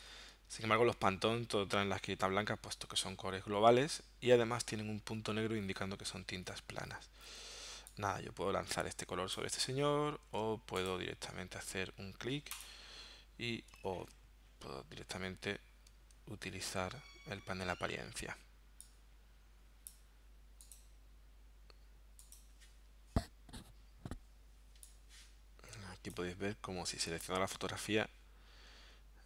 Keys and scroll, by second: 10.3 super+z, 14.0 super+z.